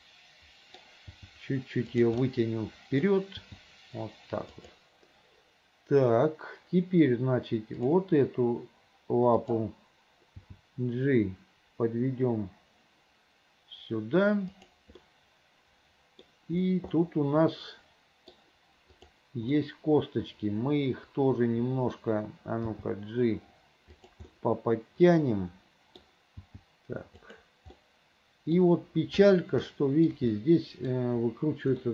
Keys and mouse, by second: 1.2 g, 2.4 click, 3.5 g, 9.5 click, 10.6 g, 15.1-16.3 drag, 17.1-18.4 middle drag, 19.6-22.1 middle drag, 22.8 g, 24.5-26.1 middle drag, 26.5 g, 27.9 click, 29.8 shift+click, 30.5 click.